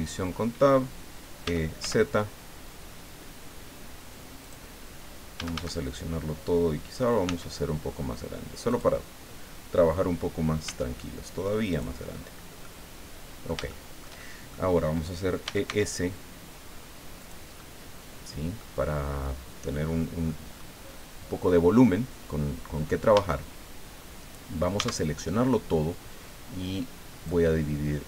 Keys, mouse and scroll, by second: 1.4 e, 1.8 z, 4.4 click, 5.4 a, 7.2 s, 8.7 click, 10.6 s, 11.7 click, 12.6-13.6 drag, 15.2-16.2 typing, 17.2 click, 17.5 middle click, 17.6-18.7 drag, 18.9 scroll down 1, 19.2 click, 20.5 scroll up 1, 21.0 scroll down 1, 23.1 a, 24.7 a, 27.2-28.0 drag.